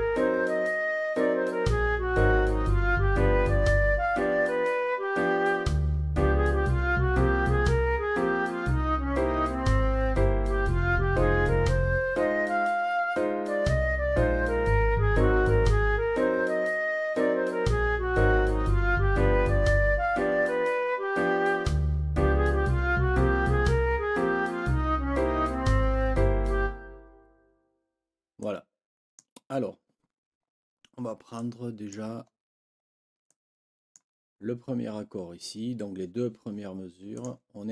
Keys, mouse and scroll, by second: 28.4 click, 28.6-29.3 scroll up 2, 28.6 click, 31.3 click, 31.5-32.5 scroll up 4, 31.6 click, 32.8 ctrl+scroll up 2, 33.2 ctrl+click, 37.1 click.